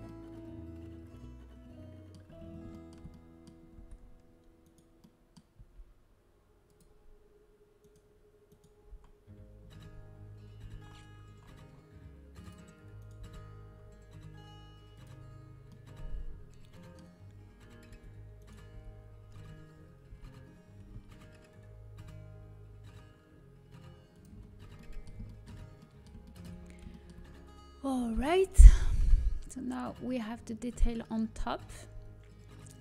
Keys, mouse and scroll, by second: 1.0-2.3 middle drag, 2.3-2.9 scroll up 1, 2.9-4.6 middle drag, 3.9 a, 4.6-6.3 right drag, 5.5 g, 6.3 middle click, 7.8-10.8 drag, 10.8 g, 12.9 click, 13.2 g, 17.8 z, 18.7 z, 20.1 g, 24.3-30.6 middle drag, 27.9 z, 30.6 z, 30.6 g.